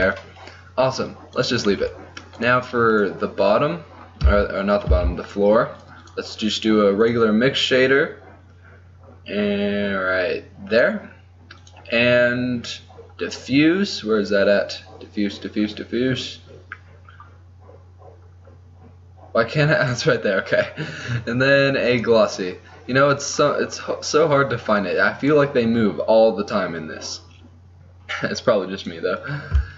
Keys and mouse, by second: 2.0 click, 2.7 middle click, 3.8 click, 4.3 z, 5.1 z, 5.8-8.2 drag, 11.7-22.8 drag, 25.5-29.7 drag.